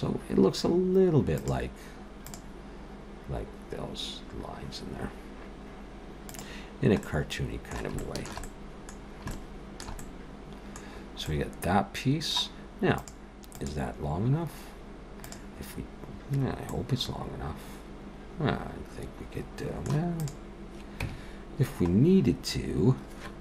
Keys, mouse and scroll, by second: 6.7 scroll down 1, 7.0 middle click, 8.0 shift+middle click, 8.4 middle click, 9.0 scroll down 2, 9.3 middle click, 10.0 middle click, 10.9-11.7 scroll down 3, 11.3 middle click, 16.7 middle click, 20.1 click, 21.0 Tab, 22.0-23.2 scroll up 1, 23.2-23.4 scroll up 1.